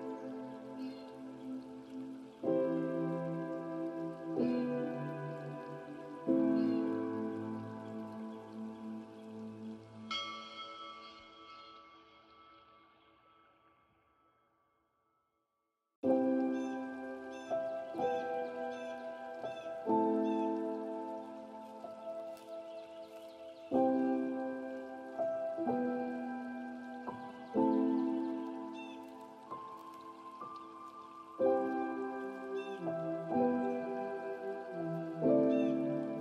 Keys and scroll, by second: 13.9 ctrl+space, 24.8 ctrl+space, 35.4 ctrl+g.